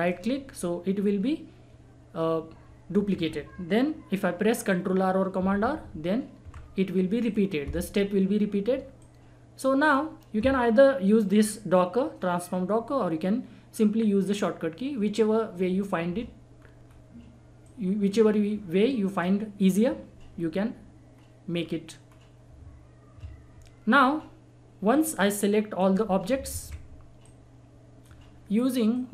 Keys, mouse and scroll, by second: 5.4 ctrl+r, 7.2-12.3 drag, 16.5 scroll down 1, 16.8 scroll up 1, 17.6 click, 21.1 scroll up 1, 21.6-22.0 scroll down 1, 23.9 scroll up 1, 24.1-24.6 scroll down 1, 24.9 click, 26.5 ctrl+z, 27.2-29.1 drag.